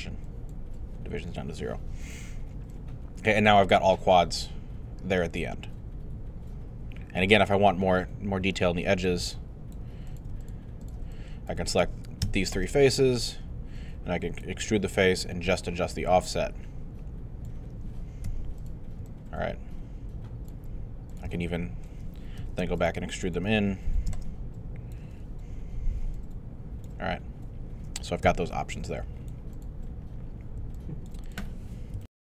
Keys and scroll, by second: 18.2 w, 19.0 alt+w, 22.4 shift+q, 28.2 q, 32.0 alt+super+..